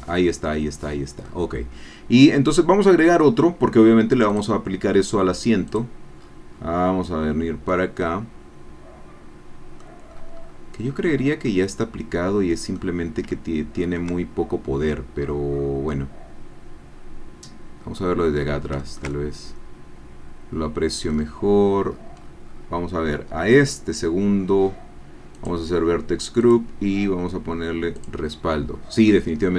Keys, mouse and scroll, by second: 1.3 scroll up 1, 1.4 scroll down 2, 4.3 click, 5.7 click, 6.2-6.9 scroll down 4, 7.2-7.5 scroll down 2, 7.7-10.0 drag, 10.1-10.7 scroll up 2, 10.9-11.2 scroll up 1, 11.2 scroll down 1, 11.4-12.9 middle drag, 13.0 scroll down 1, 13.3 shift+middle click, 14.2-14.9 shift+scroll down 2, 14.9-18.2 drag, 18.2-18.6 scroll up 2, 18.6-21.2 shift+drag, 21.9-22.7 scroll down 4, 25.4 click, 26.4 click, 28.0 click, 28.7 scroll down 1, 29.1-29.5 drag.